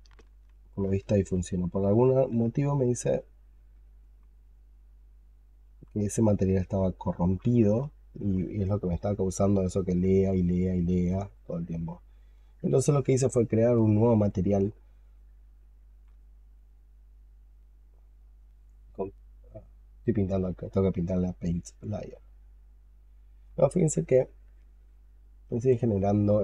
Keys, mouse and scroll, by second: 0.4 alt+click, 0.9 alt+click, 1.4 double click, 1.6 double click, 1.8 double click, 3.1 double click, 7.7 alt+click, 8.5 alt+click, 8.9 alt+right click, 9.2 alt+click, 10.1 alt+click, 10.4 alt+middle click, 13.1 alt+click, 14.7 double click.